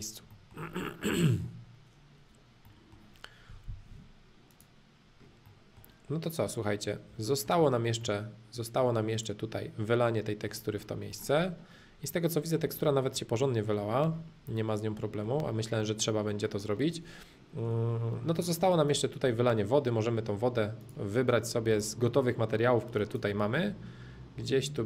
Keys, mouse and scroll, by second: 4.5 click, 5.4-7.1 middle drag, 7.2-9.1 shift+middle drag, 9.1 click, 9.7 middle click, 11.4-11.8 scroll up 1, 11.8 middle click, 12.0 middle click, 13.1 middle click, 14.5-15.6 middle drag, 15.9-17.6 middle drag, 17.6 Caps_Lock, 18.3 shift+middle click, 18.9 click, 19.2 Caps_Lock, 20.8-22.8 drag, 24.6 click.